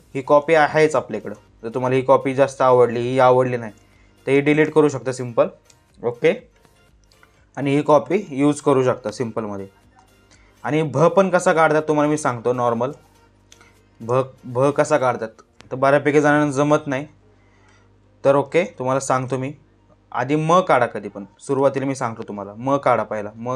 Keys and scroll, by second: 3.3 space, 5.2 Delete, 6.3 space, 11.1 space, 18.1 space.